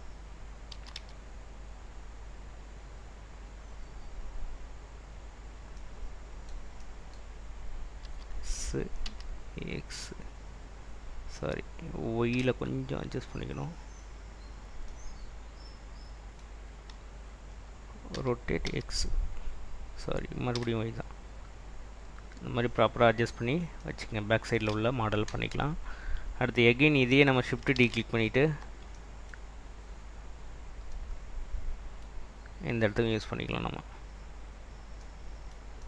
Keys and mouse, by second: 0.8 s, 1.1 z, 3.9 click, 4.1 click, 6.9 middle click, 8.1 s, 9.2 x, 12.4 y, 14.3 click, 18.2 r, 18.7 x, 20.7 y, 22.5 click, 27.0 click, 27.9 shift+d, 28.7 Escape, 29.9-30.7 drag.